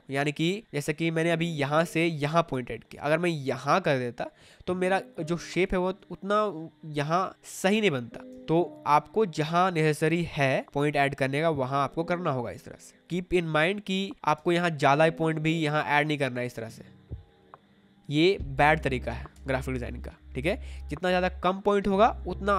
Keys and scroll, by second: 1.1 ctrl+z, 8.2 ctrl+z, 9.0 space, 14.2 ctrl+z, 18.1 ctrl+z.